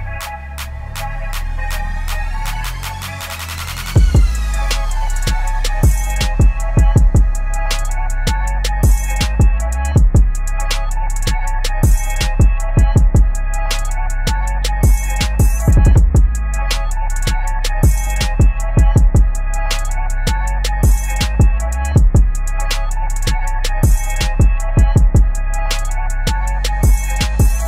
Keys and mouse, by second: 0.9 t, 1.3 click, 5.0 click, 5.5 ctrl+a, 5.8-6.8 typing, 7.5 Down, 8.9 ctrl+a, 9.7 Down, 12.1 ctrl+a, 14.2 click, 16.8 click, 19.7 click, 23.5 v, 23.9-26.4 drag.